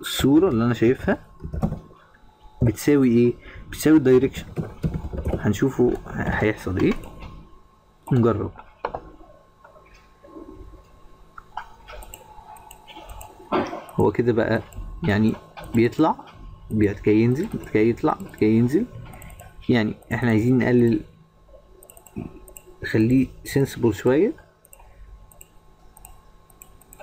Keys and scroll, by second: 0.8 shift+-.